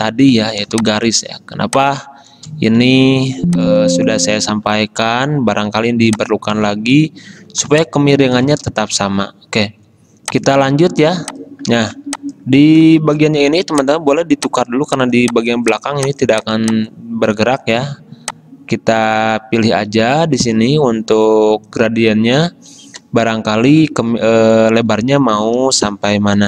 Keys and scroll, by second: 0.7 space, 3.4 space, 7.7 space, 13.1 shift+x.